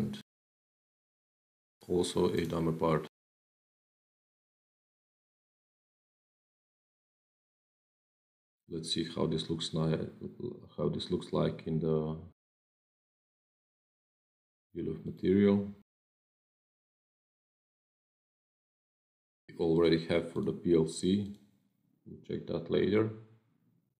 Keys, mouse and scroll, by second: 0.5 click, 0.9 ctrl+v, 2.2 click, 3.7-4.4 scroll down 8, 4.7-5.1 scroll down 1, 7.6 click, 15.0 click, 18.2 click, 19.6 click, 20.2 click, 20.7 click, 21.1 click.